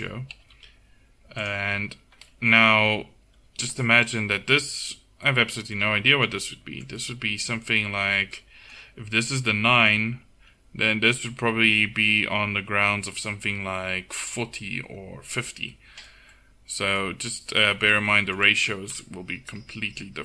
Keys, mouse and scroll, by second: 0.4 g, 2.6 KP_1, 5.9 a, 6.8 middle click, 19.0 KP_1.